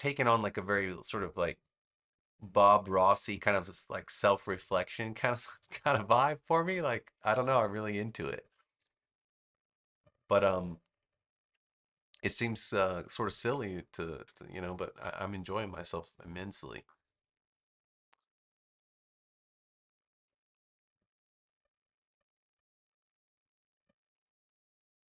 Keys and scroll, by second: 13.5 space.